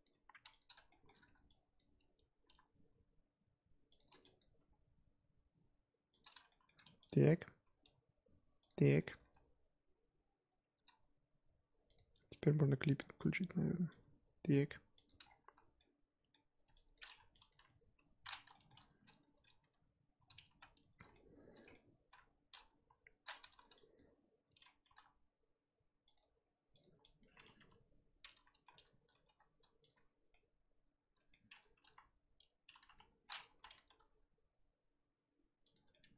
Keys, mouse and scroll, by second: 0.0 click, 0.1 g, 0.9-1.7 shift+middle drag, 1.7 click, 2.4 e, 4.4 click, 4.6 g, 6.5-7.2 shift+middle drag, 7.2 click, 7.6 e, 9.1 click, 9.2 g, 12.8 click, 13.9 g, 15.2 scroll down 3, 15.4 z, 15.8-16.9 middle drag, 16.9 click, 17.5 click, 17.5 KP_3, 18.0-18.5 scroll up 1, 18.5 shift+middle drag, 18.7-19.6 scroll up 4, 19.6 g, 20.6 z, 21.1 middle click, 22.0 z, 22.7 KP_1, 23.5 z, 23.9 click, 24.8 g, 26.2 g, 27.2 click, 27.6 KP_3, 28.6 z, 29.2 g, 30.1 z, 30.3-31.8 middle drag, 31.8 KP_1, 32.9 KP_3, 33.6 z, 34.0 g, 35.9 middle click.